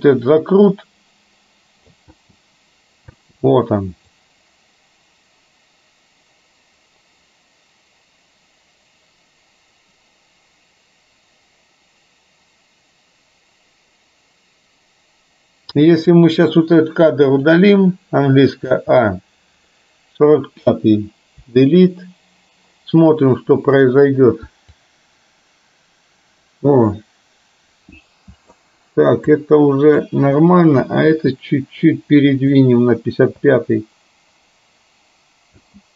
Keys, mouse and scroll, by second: 2.2 space, 3.4 space, 4.2-15.9 drag, 16.1 click, 17.3 click, 18.8 a, 21.6 Delete, 24.8-28.7 drag, 29.3 click, 31.2 g, 33.6 space.